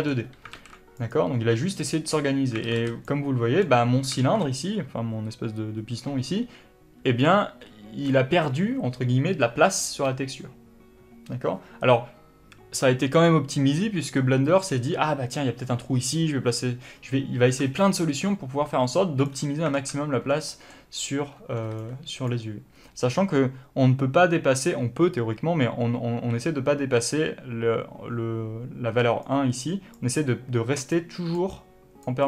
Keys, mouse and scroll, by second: 0.9 alt+a, 1.3 click, 3.0 alt+a, 19.6 click, 20.1 alt+a, 20.6 scroll down 2, 20.8-29.6 middle drag, 22.0 b, 29.6-32.2 drag, 29.9 d, 31.1 d, 31.7 d.